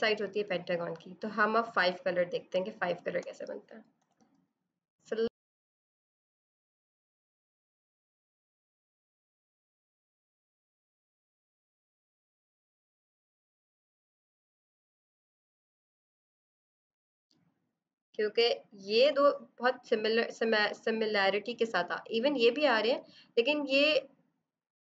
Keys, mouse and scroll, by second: 1.7 space, 2.0 click, 2.2 space, 3.9 b, 4.9 alt+click, 5.0 i, 5.4 b, 5.4 right click, 5.6 click, 6.8 click, 7.0 click, 7.3 click, 7.4 click, 7.8 click, 9.6 click, 10.2 v, 10.6 click, 12.4 ctrl+d, 12.6 Return, 12.7-13.5 typing, 13.3 click, 13.6 click, 14.0 click, 14.4 click, 14.6 click, 15.1 click, 15.2 click, 15.6 click, 15.7 click, 16.5 z, 16.6 click, 17.1 space, 17.2 click, 17.6 space, 19.0 v, 19.7 click.